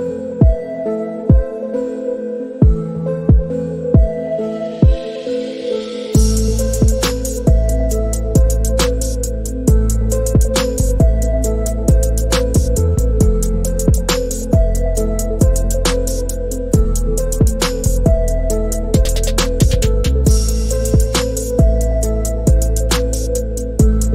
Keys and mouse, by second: 0.7 click, 2.5-3.2 drag, 3.5-4.4 shift+middle drag, 5.2-5.7 middle drag, 6.9 shift+middle click, 8.0-8.3 shift+middle drag, 9.1 click, 10.1-10.7 drag, 13.4-14.4 drag, 15.5 click, 16.8 Delete, 18.4 shift+middle click, 19.0 middle click, 19.8 shift+middle click, 22.2 shift+middle click, 23.2 click.